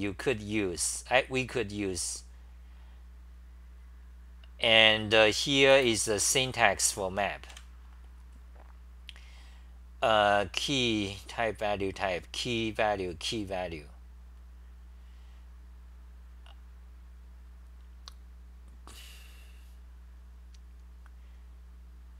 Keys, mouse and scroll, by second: 7.4-8.1 typing.